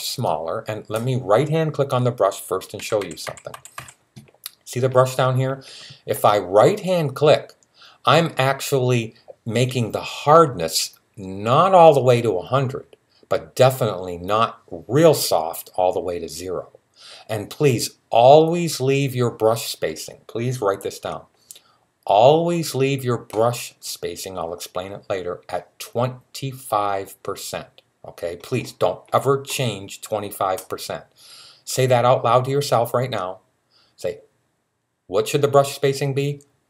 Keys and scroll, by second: 2.6-3.6 typing.